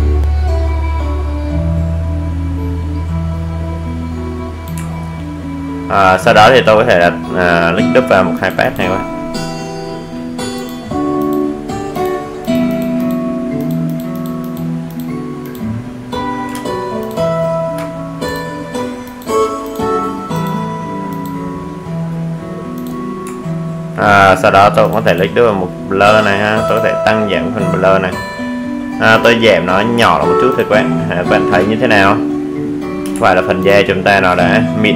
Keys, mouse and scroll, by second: 2.6 alt+scroll down 1, 5.5 click, 21.7-22.9 alt+scroll down 1, 22.9 click, 27.0 click, 30.9 space, 31.5 alt+click.